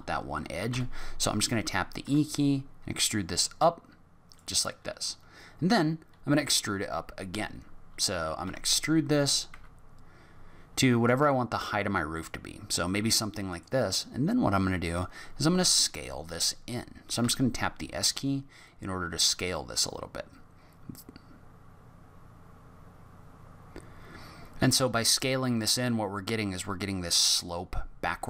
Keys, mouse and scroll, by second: 0.7 e, 8.4 e, 15.0 middle click, 17.2 s.